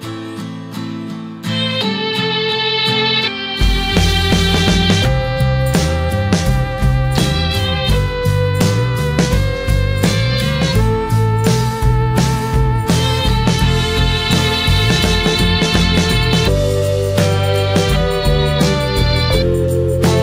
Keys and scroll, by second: 13.3 ctrl+j, 15.8 ctrl+d, 18.7 ctrl+j.